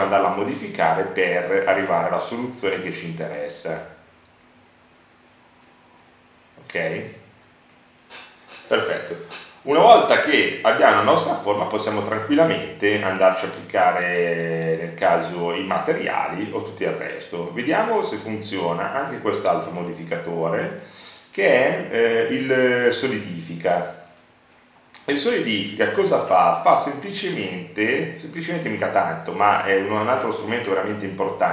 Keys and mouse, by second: 0.0 Tab, 8.9-11.6 middle drag, 20.1 middle click, 20.3 middle click.